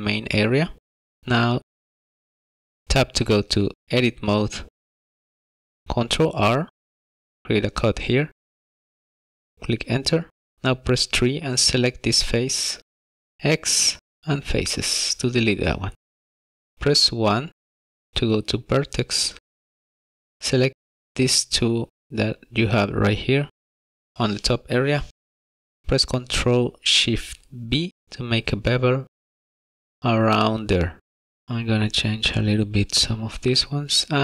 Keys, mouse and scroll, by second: 1.6 shift+middle click, 1.9 scroll up 3, 2.2 middle click, 2.4 scroll down 1, 2.5 shift+middle click, 3.4 Tab, 6.0 ctrl+r, 10.8 3, 11.4 click, 13.4 x, 16.9 1, 18.3 shift+middle click, 19.1-19.4 scroll up 1, 20.5 click, 26.2 ctrl+shift+b, 32.4 click, 32.9 click, 33.8 click.